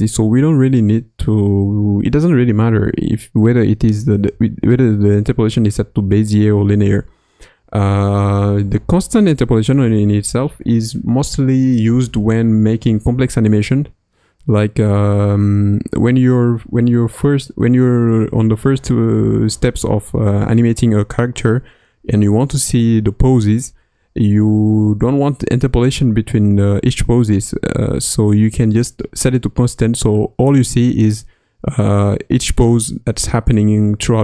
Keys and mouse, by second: 4.8 t.